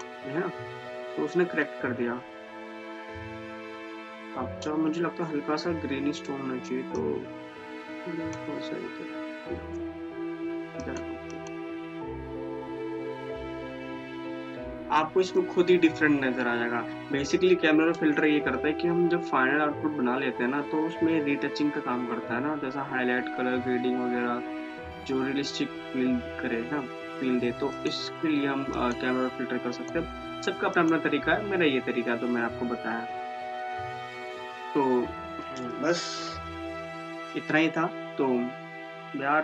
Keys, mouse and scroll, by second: 7.1-11.0 drag, 27.9 click, 33.4-36.9 drag.